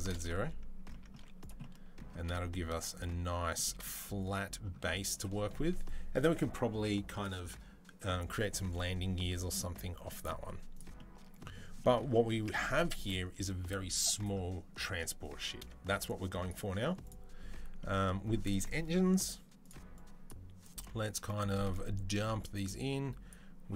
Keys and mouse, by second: 1.0 z, 3.8-15.9 middle drag, 4.6 z, 10.3 z, 12.2 Tab, 15.9-16.9 drag, 16.9-19.4 middle drag, 19.4-23.2 drag, 23.2-23.7 middle drag.